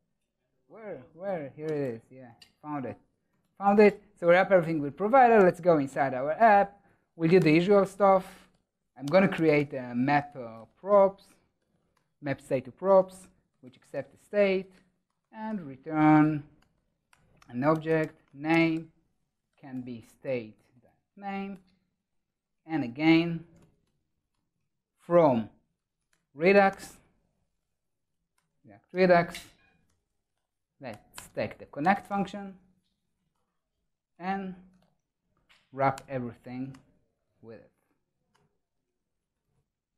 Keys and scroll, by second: 4.0 super+s, 5.7 super+b, 21.2 super+s, 28.2 Tab, 36.3 Return, 37.9 ctrl+alt+shift+Right.